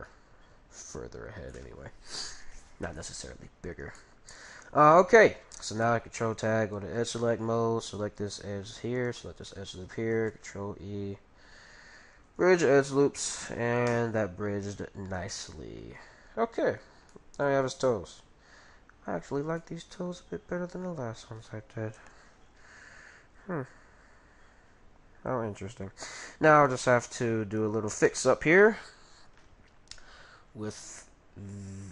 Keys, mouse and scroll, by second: 5.8 ctrl+t, 7.8-10.9 right drag, 10.3 ctrl+e, 12.3 ctrl+e, 12.9-16.3 middle drag, 13.9 Tab, 16.6 middle click, 18.6 middle click, 19.6-21.3 middle drag, 22.4 middle click, 23.1-23.7 scroll up 1, 23.7 Tab, 23.7-25.2 middle drag, 26.5-29.3 right drag, 26.8-28.5 middle drag.